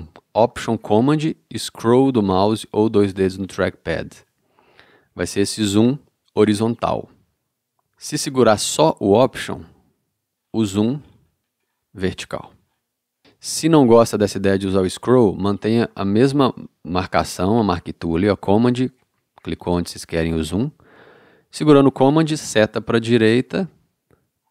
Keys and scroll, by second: 22.6 super+Right.